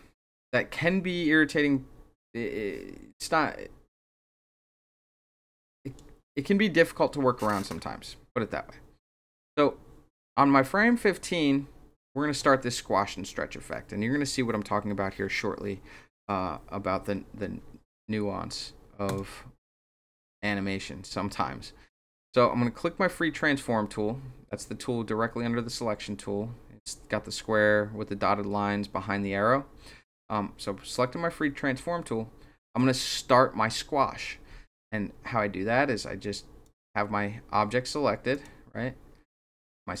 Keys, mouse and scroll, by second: 19.0 click, 36.6 click, 38.3 click, 39.9-40.0 drag.